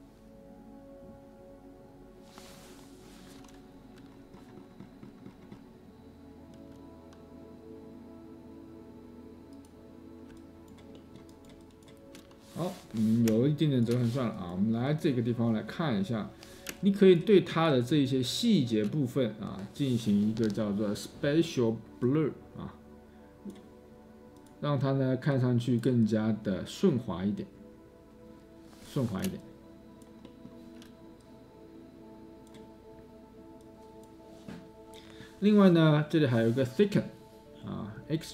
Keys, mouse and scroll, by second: 17.3-18.5 space.